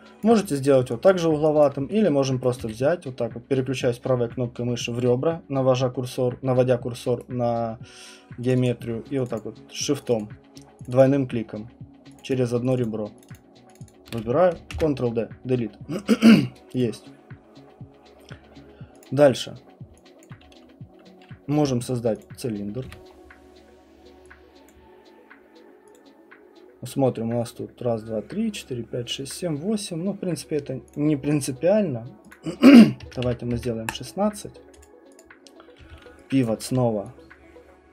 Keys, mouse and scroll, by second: 1.6 alt+click, 2.4 right click, 2.6 q, 7.2 right click, 8.5 click, 8.6 click, 9.3 shift+click, 10.1 shift+click, 10.2 shift+click, 10.8 shift+click, 12.1 shift+click, 13.3 shift+click, 14.7 ctrl+Delete, 16.5 right click, 16.8 click, 19.0 click, 20.2 alt+click, 22.2 click, 22.8 w, 23.1-24.1 middle click, 24.7 click, 25.9 click, 30.9 click, 32.3 click, 32.7-37.9 typing, 34.2 middle click, 34.8 click, 34.8 middle click, 35.2 click, 36.4 alt+right click.